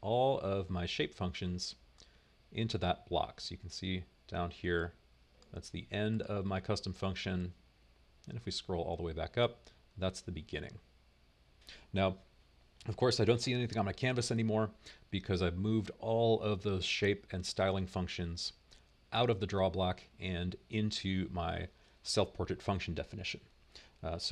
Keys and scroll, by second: 0.5 super+v.